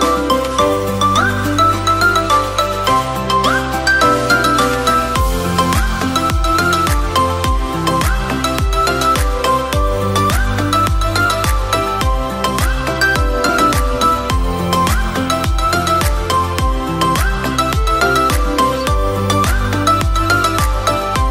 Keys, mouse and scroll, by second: 0.5 click, 3.0 click, 5.8-8.1 middle drag, 8.1 ctrl+r, 10.3 Tab, 10.7-11.6 scroll down 2, 12.9 click, 14.8-16.7 drag.